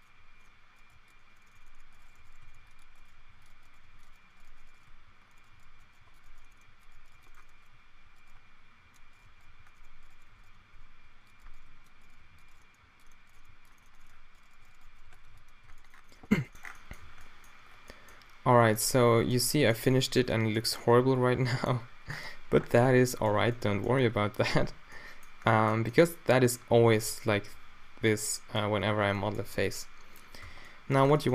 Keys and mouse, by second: 0.0-0.5 typing, 2.0 shift+right click, 2.1-3.8 typing, 2.6 ctrl+r, 3.3 ctrl+r, 3.9 ctrl+r, 4.7 shift+right click, 4.8 f, 5.0 a, 5.5 g, 5.6 q, 6.3 shift+right click, 6.6 right click, 6.9 g, 7.1 g, 8.9-13.4 typing, 9.2 drag, 10.1 shift+right click, 12.6 click, 12.6 middle click, 12.6 right click, 13.1-13.5 drag, 13.3-13.9 middle drag, 13.3 right drag, 14.0-14.4 middle drag, 14.6 right click, 14.8 alt+w, 15.0-15.6 typing, 15.4 drag, 16.3 Tab, 17.1 a, 24.6 Tab, 26.7 a, 27.0 b, 29.5 b, 30.4 q, 31.0 Tab.